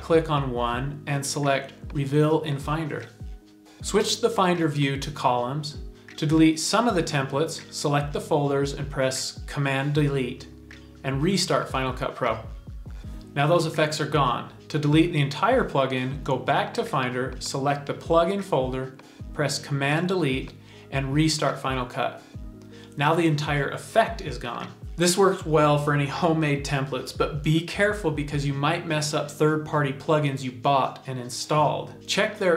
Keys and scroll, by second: 9.7 super+BackSpace, 14.0 space, 18.8 super+BackSpace.